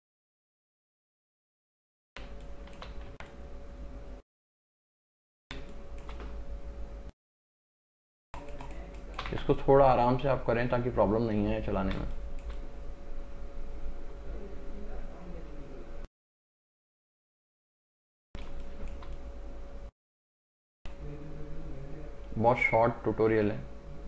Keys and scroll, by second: 1.4 space, 3.2 x, 5.7 space, 9.4 x, 12.1 space, 18.6 space, 20.7 [.